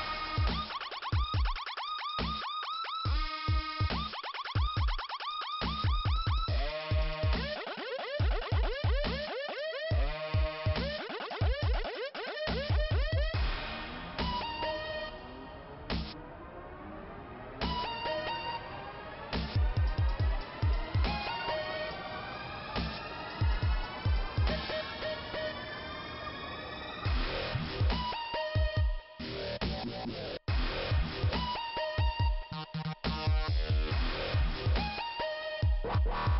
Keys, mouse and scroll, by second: 1.1-2.0 typing, 3.2 scroll up 2, 5.1 click, 5.2 click, 6.3 click, 6.4 click, 6.9 click, 6.9 click, 7.8 scroll up 1, 8.8 click, 12.1 click, 12.3 click, 12.4 right click, 12.6 double right click, 12.8 double right click, 13.8 click, 13.9 click, 14.5-15.1 scroll down 1, 18.0 scroll up 2, 19.5 click, 19.6 click, 20.3 right click, 20.9 click, 22.5 click, 22.6 click, 23.3 click, 23.4 click, 24.1 click, 26.4 click, 26.5 click, 27.9 click, 29.7 click, 30.4 click, 32.6 click, 34.2 click, 34.7 click, 34.9 click, 34.9 click, 35.6 click, 35.7 click.